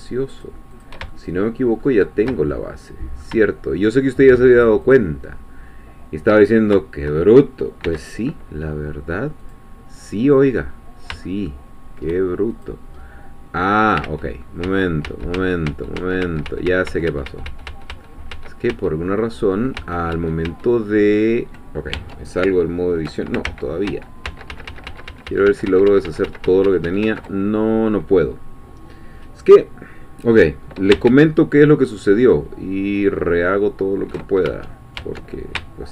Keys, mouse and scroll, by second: 0.4 shift+click, 1.1 shift+middle click, 2.1-3.4 shift+middle drag, 4.6 shift+click, 6.5 shift+scroll down 2, 7.8 x, 9.4 click, 10.1-10.7 scroll down 2, 10.7 scroll up 2, 11.2-12.5 shift+middle drag, 12.5 shift+click, 13.0 middle click, 14.0 ctrl+z, 19.8 ctrl+z, 21.9 ctrl+Tab, 23.6 ctrl+z, 31.1 ctrl+shift+z, 35.0 ctrl+shift+Tab.